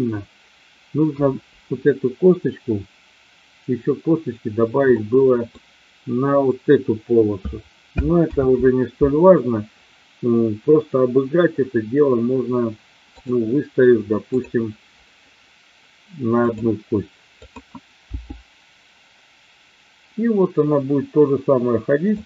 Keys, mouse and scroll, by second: 1.1 KP_1, 4.8 middle click, 8.2 ctrl+z, 14.3-15.1 drag, 17.4 click, 18.2 g.